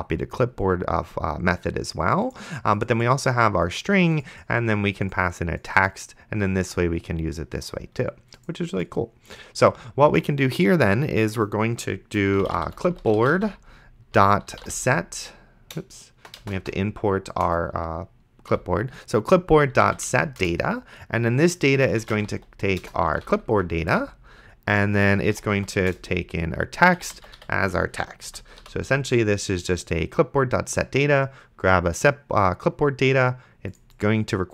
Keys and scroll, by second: 12.2-15.8 typing, 17.5 Return, 18.5-20.4 typing, 20.4 Return, 22.3-28.6 typing, 28.3 End.